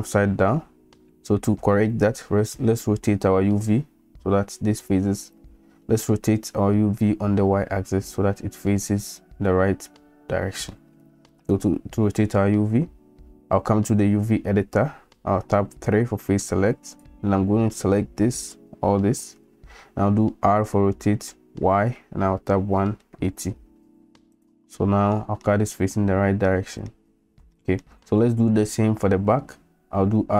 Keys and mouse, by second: 10.8 shift+middle click, 16.0 3, 20.5 r, 25.2 middle click, 26.5 middle click, 27.5 shift+middle click, 30.2 r.